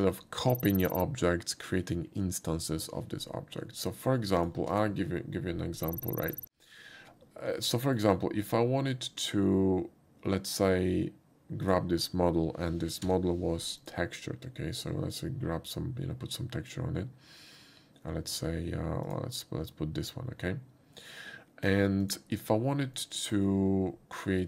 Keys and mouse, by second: 4.4 click, 4.7 x, 4.7 click, 7.8 shift+middle click, 11.7 click, 13.4 n, 13.8 click, 19.1 click, 22.0 click, 23.0 middle click.